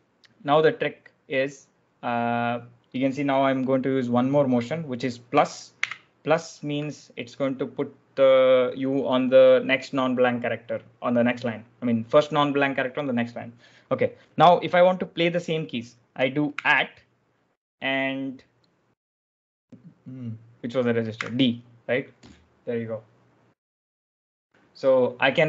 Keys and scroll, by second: 5.7 shift+=, 16.4 shift+2, 21.0 d.